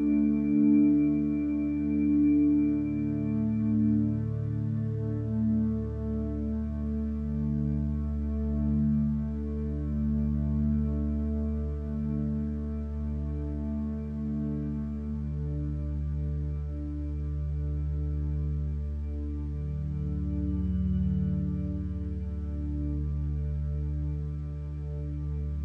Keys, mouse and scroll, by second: 5.5 b, 15.0 ctrl+z, 15.4 ctrl+space, 25.5 ctrl+space.